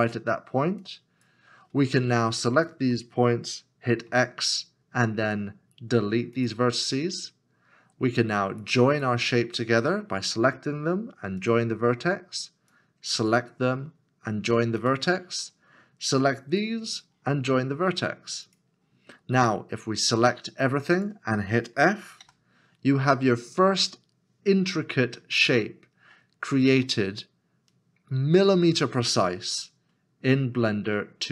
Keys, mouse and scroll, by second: 2.5 shift+click, 4.1 x, 22.2 x, 24.6 middle click.